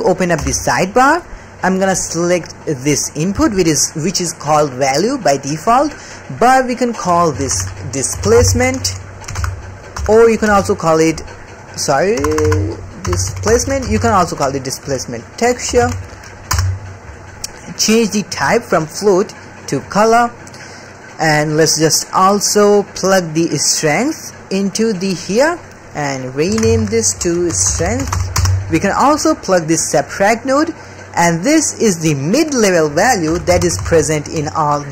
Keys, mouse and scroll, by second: 0.4 n, 3.7-5.3 middle drag, 5.7 middle click, 7.0-16.5 drag, 12.3 BackSpace, 12.4 BackSpace, 18.3-19.9 drag, 20.2 click, 20.7 middle click, 21.0 click, 21.3 click, 22.9-23.5 drag, 24.0 click, 25.3 click, 26.2-28.4 drag, 30.3 drag, 30.5 click, 31.1 click, 32.0 click, 32.3-34.9 drag.